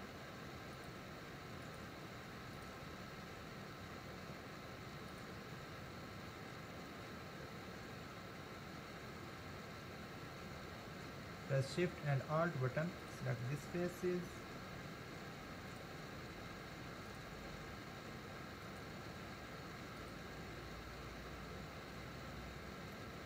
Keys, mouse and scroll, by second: 0.8 shift+click, 1.6 shift+click, 2.5 shift+click, 5.1 shift+click, 13.0 alt+shift+click, 14.3 alt+shift+click, 15.7 alt+shift+click, 17.1 alt+shift+click, 18.7 alt+shift+click, 20.0 alt+shift+click, 23.0-23.2 middle drag.